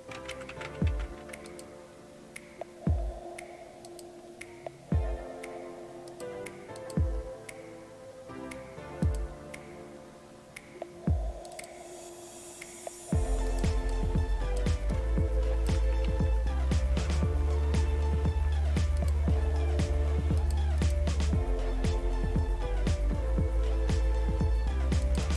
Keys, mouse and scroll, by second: 0.0-1.5 typing, 1.5 click, 3.9 click, 6.1 click, 11.5 click, 13.5 click, 14.9 click, 17.0-18.9 typing, 20.8 click, 25.2 click.